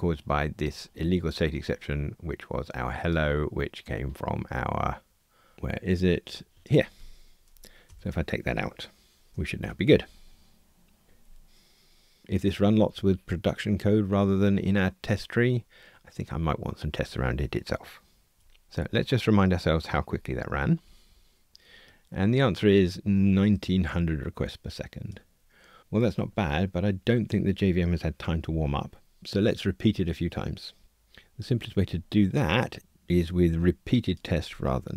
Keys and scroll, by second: 7.9 super+BackSpace, 9.3 ctrl+r, 20.8 super+4.